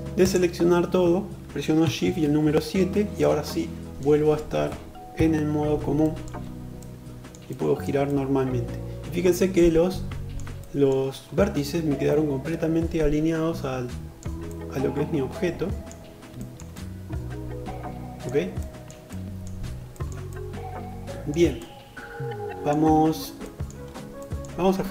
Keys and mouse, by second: 0.9 shift+KP_7, 9.2-24.9 alt+middle drag.